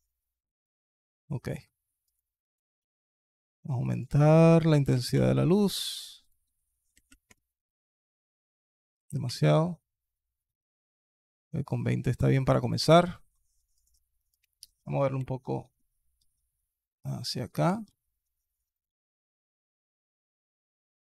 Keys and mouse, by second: 1.1-2.1 alt+drag, 2.3 click, 2.7 alt+drag, 3.8-5.0 drag, 6.2 click, 7.9-9.1 drag, 11.4 click, 11.8-12.2 alt+drag, 14.2 click, 15.0 alt+KP_7, 16.0 g, 17.7 r, 18.7 g, 20.0 r.